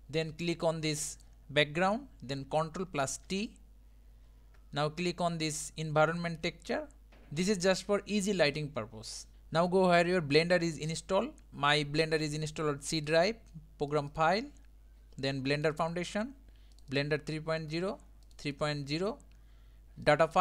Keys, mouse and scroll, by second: 1.1-3.3 drag, 3.3 ctrl+t, 9.3-16.7 drag.